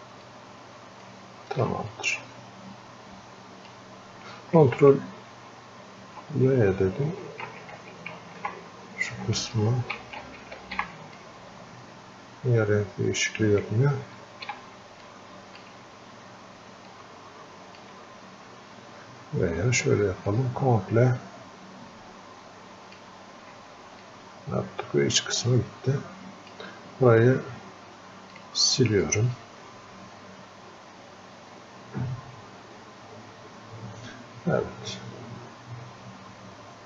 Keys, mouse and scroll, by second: 1.9-5.0 drag, 5.0 ctrl+w, 11.2-14.2 drag, 14.2 ctrl+w, 15.0 alt+click, 15.9 scroll up 1, 16.9-20.3 alt+drag, 20.3-24.0 ctrl+drag, 24.0-36.8 drag.